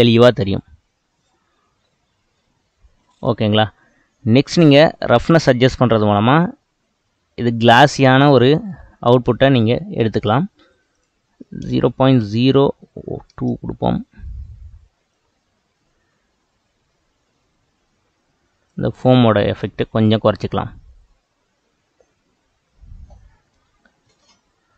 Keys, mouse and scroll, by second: 2.4 space, 4.5-6.4 drag, 6.4-9.0 middle drag, 9.0 space, 10.2 space, 13.5-18.5 drag, 19.5-20.2 middle drag, 20.2 space, 24.3 space.